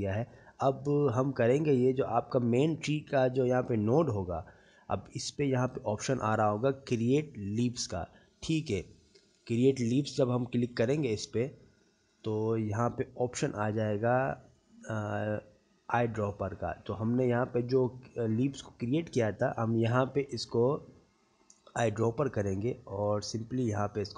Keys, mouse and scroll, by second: 4.1 middle click, 5.7 click, 14.2 click, 23.6 click.